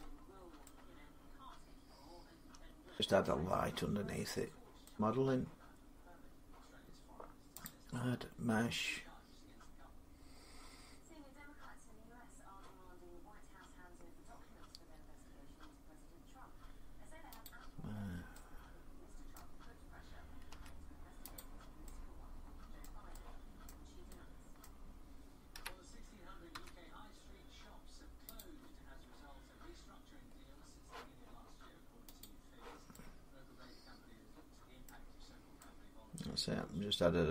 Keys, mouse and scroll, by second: 0.0 scroll down 6, 2.7 click, 2.7 middle click, 2.7 scroll down 1, 2.9 middle click, 3.7 middle click, 4.7 click, 6.9-12.6 drag, 17.2-19.1 drag, 19.1-20.3 middle drag, 20.3 s, 21.2 click, 22.6 middle click, 23.5 middle click, 25.3 middle click, 25.3-26.3 typing, 28.2 click, 32.0 click, 34.6 middle click, 35.0-35.4 scroll down 4, 37.0 scroll up 4.